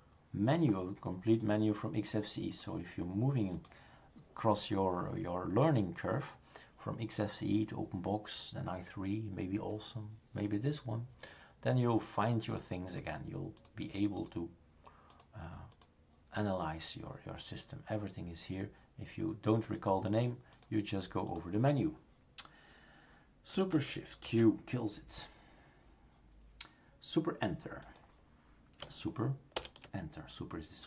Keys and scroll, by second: 24.3 shift+super+q, 29.6 super+Return.